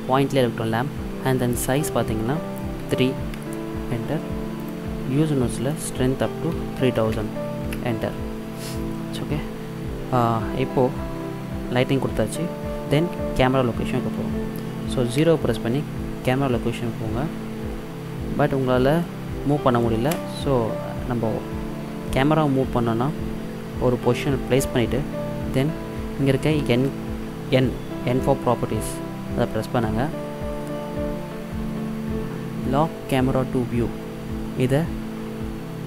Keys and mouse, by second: 1.7-3.4 drag, 4.6-7.6 drag, 7.0 KP_0, 7.6 KP_0, 15.2 KP_0, 18.8-19.2 middle drag, 19.3 middle click, 19.5 middle click, 19.7 middle click, 20.1 KP_0, 27.7 n, 30.8-35.8 middle drag.